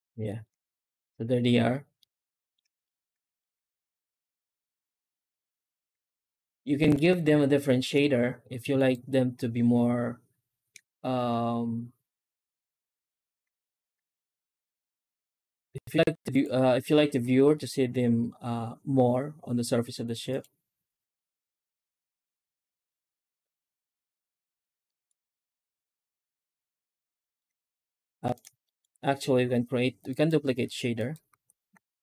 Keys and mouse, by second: 0.1 middle drag, 1.8 middle click, 2.7 shift+middle drag, 3.0 middle click, 3.4 z, 5.8 z, 7.6 middle drag, 8.6 right click, 11.1 alt+shift+z, 13.3 alt+shift+z, 13.8 z, 15.6 z, 19.6 z, 24.7 middle drag, 27.0 shift+middle drag, 27.8 z, 28.5 shift+middle drag, 29.9 right click, 30.8 right click, 31.2 alt+shift+z.